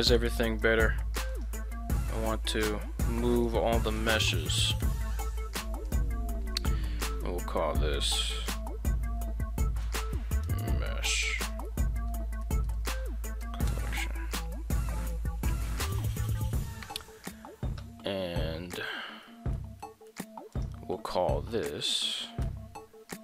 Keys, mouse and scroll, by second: 0.5 shift+right click, 1.3 shift+right click, 2.1 shift+middle drag, 3.3 shift+right click, 3.8 shift+right click, 4.8 m, 11.8 l, 19.3 shift+middle click, 19.8 shift+middle click, 20.5 right click, 22.4 m.